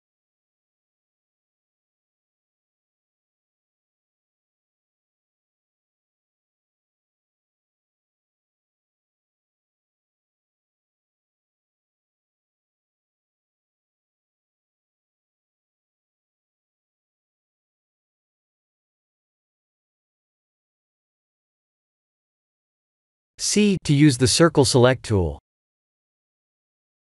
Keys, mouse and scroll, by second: 0.6 c, 18.1 Tab, 18.8 Tab, 19.4 a, 20.0 right click, 20.5 Tab, 21.2 Tab, 22.8 click, 24.1 3, 25.2 c.